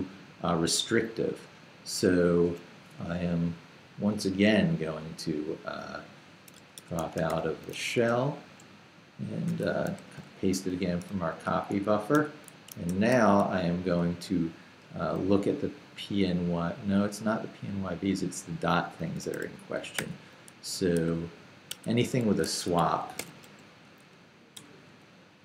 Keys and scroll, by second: 6.5-7.8 typing, 8.0 Return, 9.5 i, 10.0 super+i, 10.2 super+v, 10.8 super+k, 11.6 k, 11.7 Escape, 12.9 shift+v, 13.4 shift+k, 14.1 k, 14.8 j, 18.0 k, 20.0 d, 22.0 k, 22.7 Escape, 23.2 o, 24.0 i, 24.5 BackSpace.